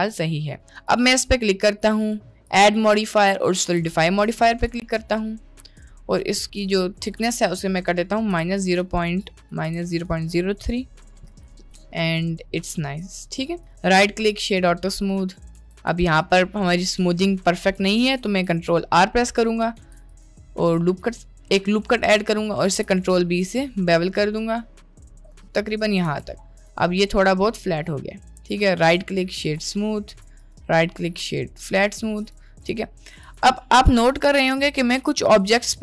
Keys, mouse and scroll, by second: 1.2 middle click, 2.0-5.0 drag, 5.9-7.2 drag, 7.9-9.4 drag, 9.5-11.3 drag, 11.7-12.4 middle drag, 12.9-13.5 middle drag, 13.9-14.5 right drag, 15.7 Tab, 15.9 Tab, 16.1 middle click, 17.4 middle click, 17.7 Tab, 18.4 ctrl+t, 19.8 ctrl+r, 21.3 middle click, 22.3 middle click, 22.7 ctrl+b, 26.1 Tab, 27.1 middle drag, 27.5-28.1 middle drag, 29.0-29.6 drag, 30.2 click, 30.7 right click, 31.8 middle click, 32.8-33.4 right drag, 33.8 middle click, 34.4 drag, 35.0 drag, 35.6 click.